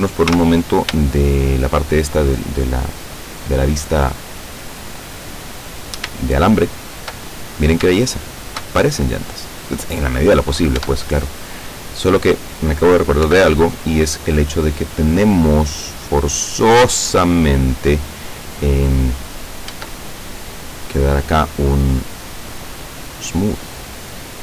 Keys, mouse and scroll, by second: 0.3 z, 1.1 shift+middle click, 2.0-3.7 shift+middle drag, 6.3 shift+middle click, 7.4-7.8 shift+scroll up 1, 8.0 shift+middle click, 9.3 right click, 10.8 Tab, 11.5 right click, 13.3 l, 19.8 Tab, 20.9 right click, 23.3 click.